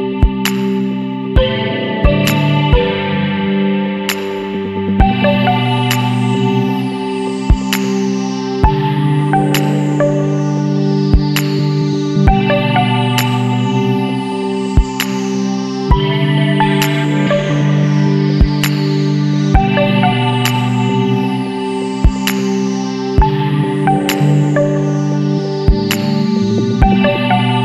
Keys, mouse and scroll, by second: 0.3-1.8 scroll up 7, 2.7 scroll up 2, 3.4-8.2 middle drag, 3.6-11.3 drag, 8.6-11.3 middle drag, 12.5-14.6 middle drag, 12.7-14.6 drag, 14.9 scroll down 1, 15.6-16.8 middle drag, 15.9 click, 17.1-17.5 scroll up 1, 18.6 Left, 19.3 Right, 20.4-21.8 middle drag, 20.7-21.8 drag, 22.6-23.9 middle drag, 22.7-23.9 drag, 23.9 Up.